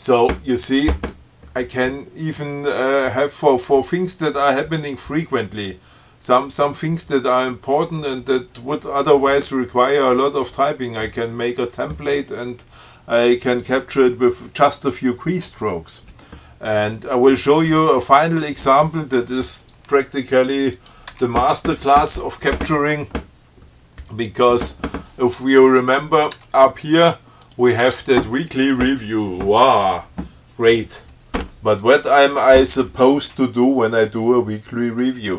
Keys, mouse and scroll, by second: 21.0 click, 21.4 Tab, 26.4 click, 26.6 Tab, 27.7 click, 28.1 Tab.